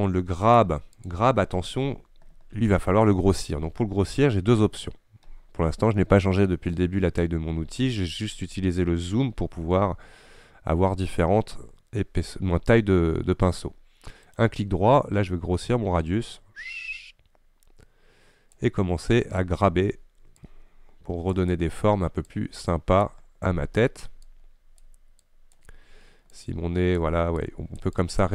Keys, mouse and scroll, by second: 7.9-8.4 scroll up 3, 8.4-8.7 scroll down 5, 9.0-9.5 scroll up 5, 9.5-9.9 scroll down 5, 10.2-10.7 scroll up 6, 10.7-11.0 scroll down 2, 11.1-11.5 scroll up 5, 11.5-11.8 scroll down 4, 11.8 scroll up 1, 12.0 scroll down 4, 12.3 scroll up 1, 12.5 scroll down 1, 12.6-13.1 scroll up 2, 13.1-13.6 scroll down 5, 13.6-16.2 scroll up 3, 16.2 scroll up 1, 16.3-17.3 right drag, 20.5-28.3 drag.